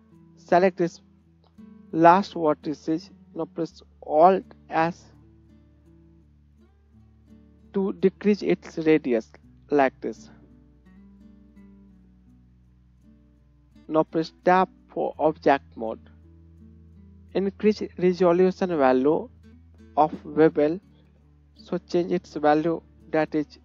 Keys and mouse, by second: 0.4 click, 0.4-4.4 right drag, 4.4 alt+click, 4.7 alt+s, 5.0-11.0 right drag, 13.2 Tab, 16.2-21.4 right drag, 21.4-23.6 middle drag.